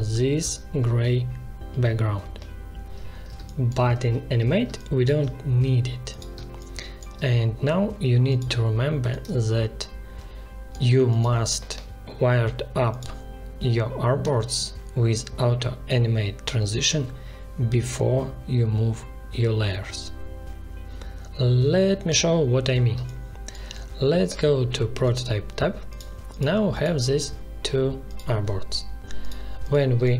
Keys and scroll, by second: 3.3 space, 3.9 ctrl+z, 4.6 space, 6.3 space, 22.9 space, 29.9 space.